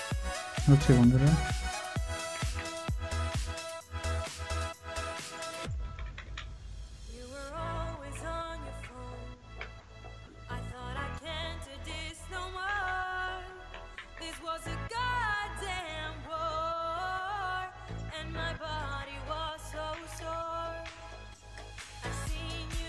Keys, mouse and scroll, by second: 0.3 scroll down 1, 0.9-2.6 typing, 4.3-5.0 scroll down 1, 5.0-6.1 typing, 5.4 double click, 7.9-9.3 typing, 12.4-13.9 typing, 19.8-21.1 typing, 21.0 double click.